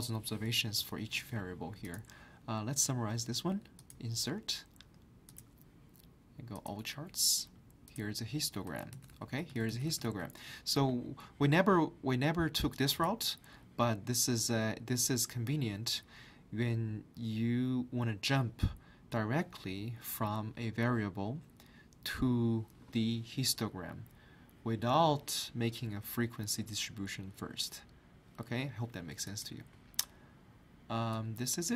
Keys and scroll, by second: 0.8 ctrl+Up.